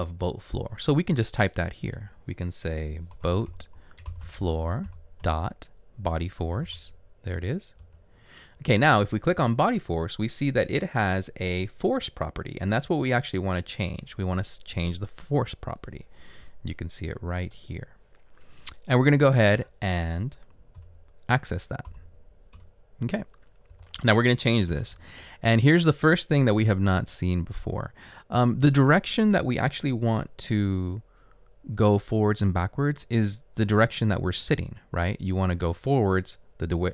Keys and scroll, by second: 3.0-5.7 typing, 20.8 typing, 21.9-22.6 typing.